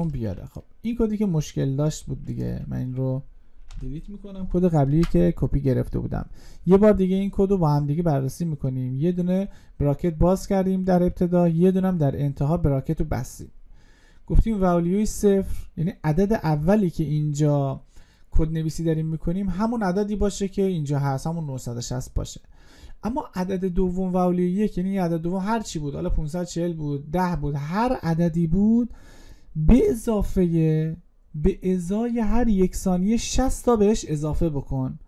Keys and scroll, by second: 4.6 ctrl+v.